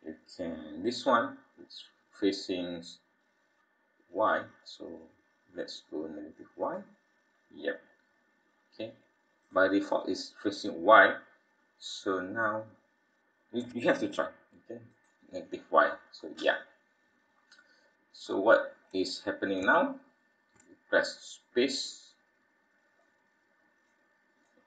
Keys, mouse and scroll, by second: 1.2-1.5 scroll down 3, 6.6 click, 7.3-8.2 scroll up 15, 9.4 click, 11.8 scroll down 3, 14.9 click, 15.7-16.6 scroll down 9, 16.5 scroll up 1, 16.6-18.2 scroll down 9, 18.3-18.9 scroll up 9, 19.7 shift+middle click, 22.1 click, 23.9 click.